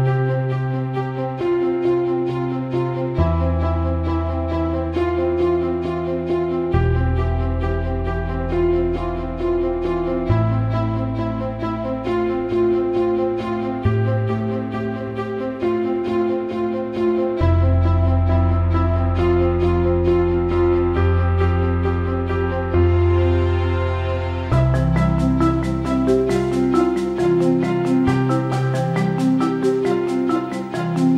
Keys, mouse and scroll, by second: 0.0 click, 1.2 click, 2.7 3, 3.3 click, 3.8 ctrl+d, 4.0 ctrl+click, 4.2 ctrl+d, 5.1 ctrl+click, 5.5 scroll down 1, 5.7 ctrl+z, 6.2 ctrl+d, 6.3 ctrl+click, 6.3 ctrl+d, 6.8 ctrl+z, 7.1 ctrl+click, 9.6 click, 11.4 click, 13.9 click, 19.8 ctrl+-, 20.3 click, 21.9 right click, 22.1 click, 26.6 typing, 26.8 click, 27.9 right click, 27.9 typing, 28.4-31.1 drag.